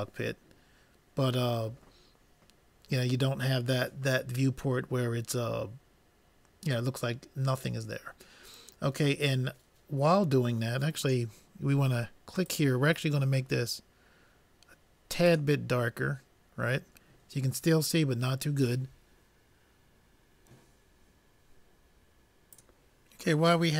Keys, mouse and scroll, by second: 13.1-14.5 drag.